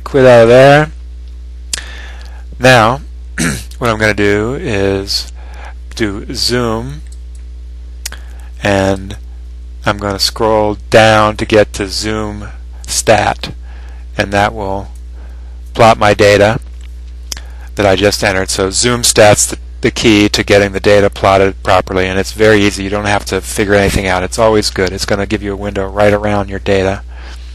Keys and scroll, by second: 9.1 Up, 11.5 Up, 15.0 Return.